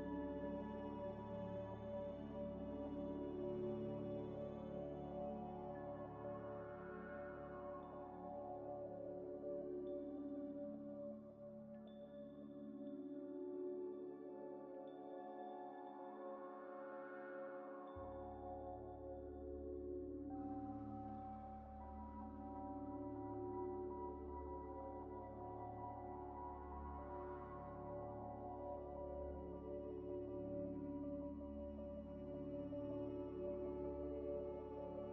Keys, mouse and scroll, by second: 2.0 scroll down 1, 2.7 middle click, 4.0 middle click, 4.0 z, 4.6 z, 4.9 z, 5.7 Tab, 6.5 Tab, 7.2 Tab, 7.8 middle click, 8.7 scroll down 1, 10.3 scroll down 1, 10.7 shift+click, 11.0 ctrl+c, 12.1 right click, 13.8 scroll up 1, 14.2 middle click, 14.3-14.8 scroll up 2, 14.8 ctrl+z, 18.7 scroll down 1, 21.6 middle click, 22.4 right click, 23.2 scroll up 1, 23.4 scroll down 1, 24.0 Tab, 24.3 2, 24.7 alt+click, 25.1 alt+shift+click, 26.0 scroll down 1, 26.4 ctrl+b, 27.2 scroll up 1, 27.8 Escape, 27.9 Escape, 29.2 alt+shift+click, 30.8 alt+shift+click, 31.8 alt+shift+click, 32.2 ctrl+shift+click, 33.1 scroll up 1, 33.7 scroll down 1, 34.0 ctrl+v.